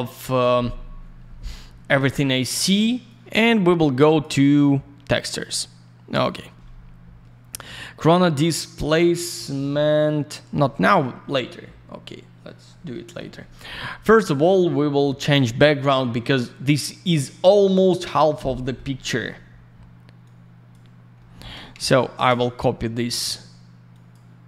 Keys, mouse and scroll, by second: 3.0 click, 5.2 click, 5.3 click, 6.1 click, 11.3 alt+middle click, 12.6 middle click, 13.3 middle click, 13.5 middle click, 13.9 F10, 18.5 middle click, 20.2 click, 21.1 middle click, 21.8 shift+click, 23.9 click.